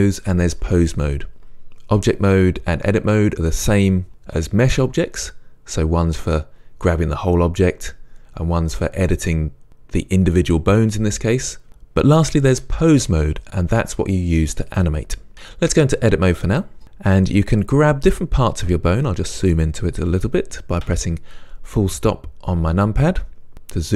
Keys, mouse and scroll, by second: 16.8 click, 19.0 scroll up 1, 20.9 KP_Decimal, 23.5 scroll down 1.